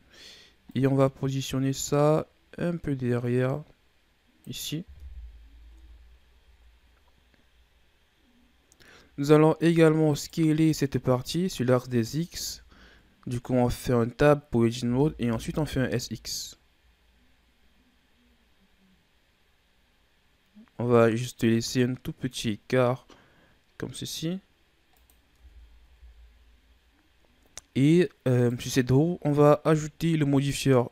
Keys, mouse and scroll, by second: 0.6-3.7 drag, 4.9 KP_1, 5.7 Tab, 6.3 a, 6.4-7.3 scroll down 5, 7.3-8.1 scroll down 3, 8.1-9.3 scroll up 9, 9.3 scroll up 3, 10.0 right click, 12.4 Tab, 14.8 s, 25.3 Tab, 25.8 a, 26.0-27.2 scroll down 6, 27.2-28.3 scroll up 2, 28.3 right click, 30.3-30.9 drag.